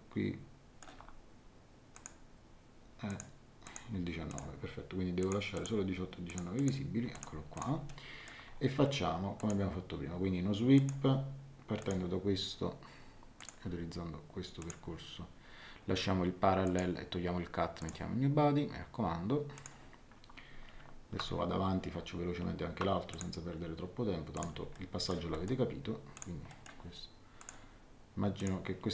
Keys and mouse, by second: 1.9 click, 3.0 click, 7.8 middle click, 9.3 click, 10.7 click, 11.8 click, 13.3 click, 14.6 click, 16.6 click, 17.8 click, 19.5 click, 23.1 click, 24.3 click, 24.7 shift+middle click, 26.1 click, 26.5 middle click, 27.4 click.